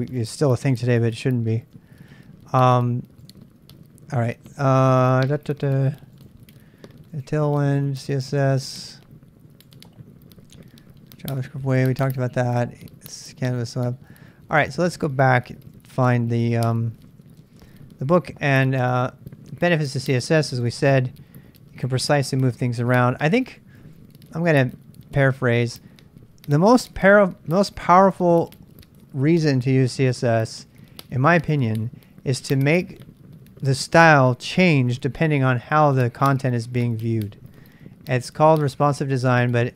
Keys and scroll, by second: 1.6 super+Tab, 14.5 super+Tab, 15.7 super+Tab, 17.0 super+Tab, 17.3 super+Tab, 17.6 super+Tab, 23.8 j, 24.0 j, 24.4 j, 24.4 j.